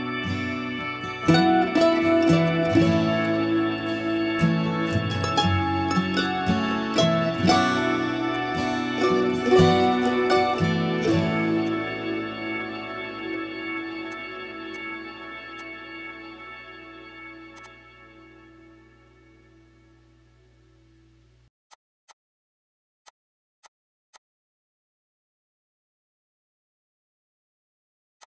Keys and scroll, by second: 19.4 ctrl+g, 20.7 ctrl+x, 21.4 Escape, 21.5 Escape, 21.7 Escape.